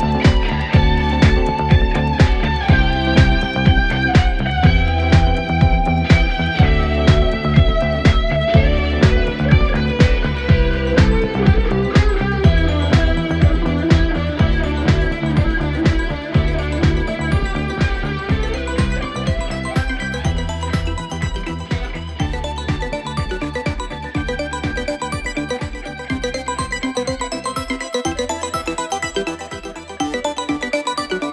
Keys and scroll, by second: 7.5 4, 11.7 3, 12.8 Delete, 16.4 Delete, 17.0 4, 20.3 2, 23.5 Escape, 25.4 4, 25.9 2.